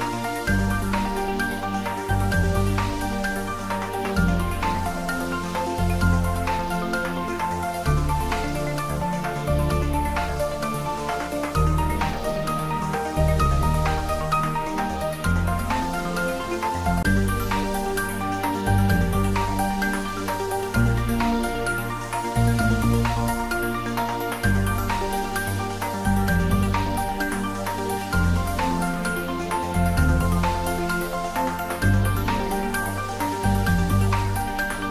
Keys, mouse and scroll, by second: 1.1 shift+d, 2.0 click, 2.8 ctrl+z, 4.9 ctrl+z, 5.9-7.5 drag, 7.5 shift+d, 7.8 r, 11.0 click, 11.4-12.3 typing, 14.7 y, 15.1 click, 15.5 r, 17.7 click, 18.2 g, 18.7 x, 21.1 click, 21.3-22.2 typing, 23.8 Down, 24.5 click, 25.6 shift+d, 26.2 y, 31.2 click, 32.1-32.6 scroll down 1, 32.7-34.9 middle drag.